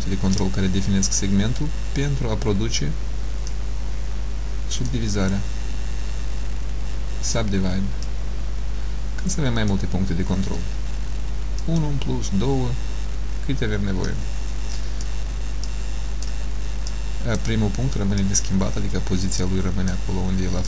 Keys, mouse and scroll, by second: 3.6 click, 8.1 click, 11.6 click, 14.1 click, 15.8 click, 17.0 click, 18.3 click.